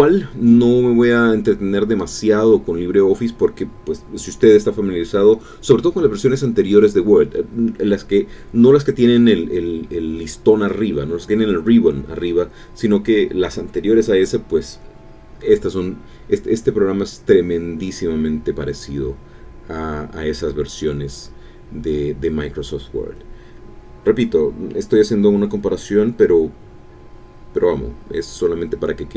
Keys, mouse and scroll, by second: 0.5 Return, 3.1 ctrl+u, 4.1-6.2 typing, 6.7 Return, 8.1 ctrl+u, 8.6 ctrl+b, 9.9 ctrl+i, 16.1-17.3 typing, 18.5 Return, 18.6-20.5 typing, 21.2 Return, 25.4 ctrl+i, 25.6-29.1 typing.